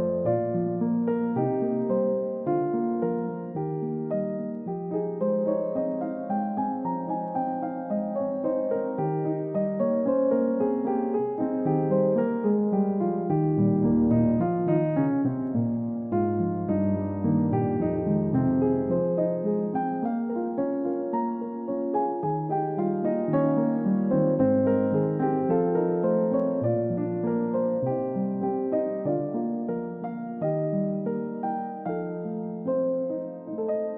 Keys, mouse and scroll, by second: 2.7 scroll up 1, 5.1-5.5 scroll up 1, 5.5 scroll down 1, 5.9 alt+click, 7.4-8.0 scroll down 1, 8.5 middle click, 9.2 scroll up 1, 9.8 scroll down 1, 14.3-14.7 scroll up 1, 15.0 middle click, 16.6 ctrl+d, 19.2 space, 23.9-24.9 scroll up 1.